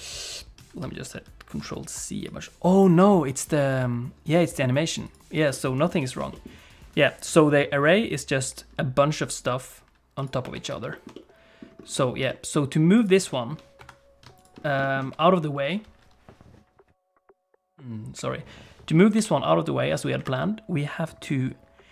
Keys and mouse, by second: 0.1 ctrl+z, 0.3 ctrl+z, 0.6 ctrl+z, 0.8 ctrl+z, 1.1 ctrl+z, 1.6 ctrl+z, 2.2 click, 3.7 click, 4.4 middle click, 5.5 middle click, 6.0 shift+middle click, 6.3 middle click, 8.4 click, 10.5 alt+g, 10.9 shift+middle click, 11.1 middle click, 12.0 shift+middle click, 12.3 middle click, 13.0 click, 13.3 shift+middle click, 13.8 KP_7, 14.8 shift+click, 19.1 g.